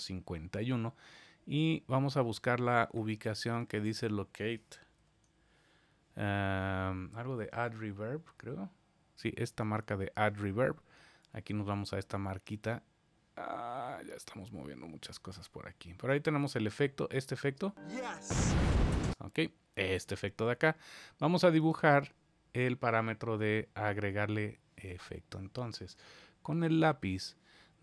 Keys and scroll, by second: 4.9 super+5.